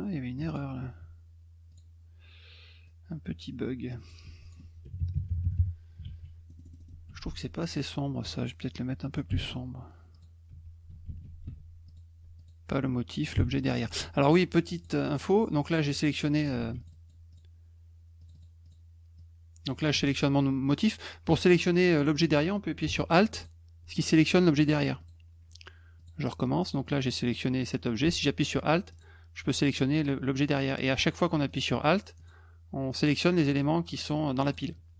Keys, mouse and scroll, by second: 0.4 alt+click, 1.7 click, 2.8-4.1 drag, 4.3 F1, 4.4 click, 6.0 ctrl+s, 6.5 middle click, 6.5-6.8 scroll, 6.6 middle click, 6.8 middle click, 7.1 F2, 7.6 click, 10.1 click, 10.5 F1, 11.0 ctrl+z, 11.4 F2, 11.9 click, 12.4 alt+click, 14.8 click, 15.1 click, 15.9-16.4 drag, 16.6 ctrl+z, 16.8 click, 16.9 click, 17.3 click, 18.2 click, 18.3 click, 18.6 click, 19.2 click, 20.0 ctrl+z, 23.3 alt+click, 25.0 click, 26.0 click, 28.9 alt+click, 30.9 alt+click, 31.5 alt+click, 32.2 alt+click, 32.9 alt+click, 33.4 alt+click, 34.0 alt+click, 34.4 alt+click.